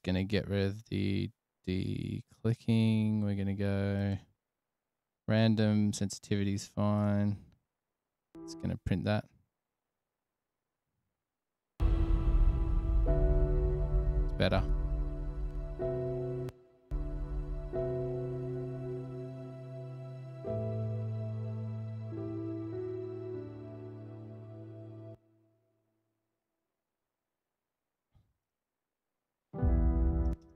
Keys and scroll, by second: 12.1 space, 13.6 f, 15.1 f, 16.8 space, 17.1 space, 25.4 Return, 25.7 Return, 26.1 super+[, 26.3 super+[, 26.4 super+[, 27.6 super+s.